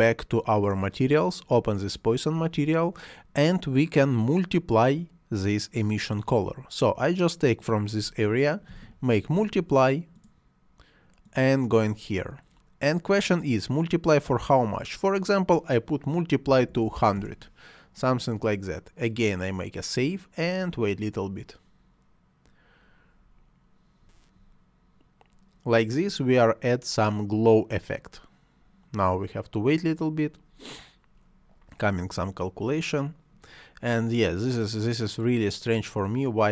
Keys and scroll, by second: 8.7 *, 16.4 1, 17.1 Return.